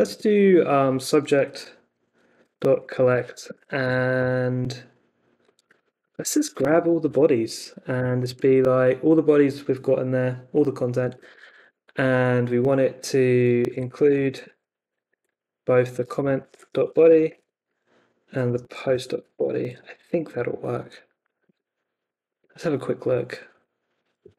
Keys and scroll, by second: 0.9 c, 2.1-4.0 typing, 5.6-7.1 typing, 7.9 Escape, 8.3 shift+a, 10.9 BackSpace, 13.4-20.6 typing, 15.0 Left, 20.3 Down, 21.4 super+s, 21.6 Up, 22.3 super+Tab, 23.5 Up.